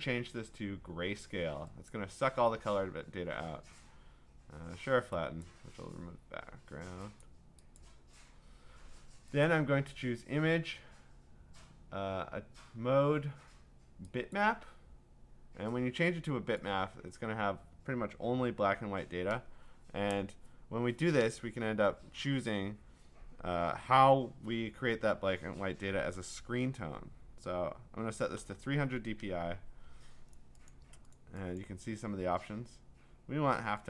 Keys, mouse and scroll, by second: 1.9 click, 5.4 click, 7.2 click, 7.8 click, 9.5 click, 14.3 click, 16.6 click, 26.0 F9, 28.1-29.0 typing, 30.7 click, 31.1 click, 31.6 click.